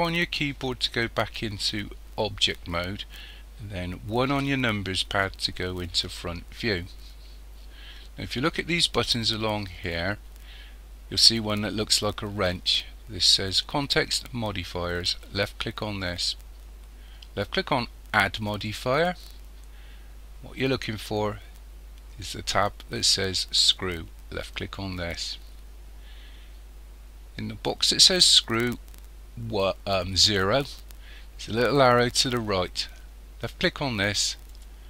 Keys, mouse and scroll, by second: 4.3 KP_1, 16.1 click, 18.5 click, 33.5 click.